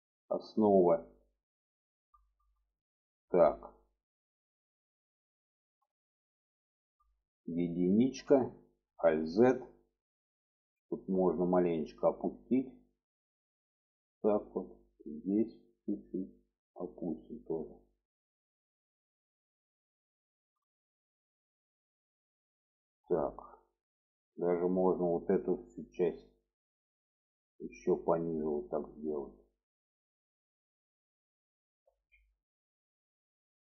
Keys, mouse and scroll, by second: 0.0 shift+middle click, 0.4-1.7 middle drag, 2.0 shift+middle click, 2.8 shift+middle click, 4.3 shift+middle click, 5.1 middle click, 6.5 shift+middle click, 7.9 1, 8.9 alt+z, 9.7 click, 12.5-14.1 drag, 14.6 click, 15.8-18.2 drag, 18.5 click, 19.4 shift+middle click, 20.1 shift+middle click, 21.6 shift+middle click, 23.6-24.8 drag, 26.1-30.1 drag, 30.6 click, 31.7 alt+z, 32.1-33.7 middle drag.